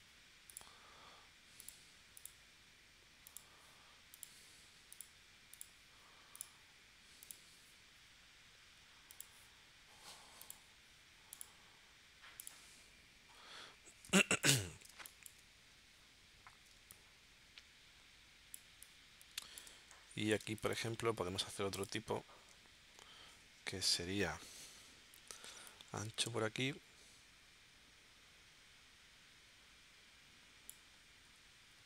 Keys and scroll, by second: 14.0 space, 14.9 space, 16.7 space, 20.4 space, 24.1 shift+w.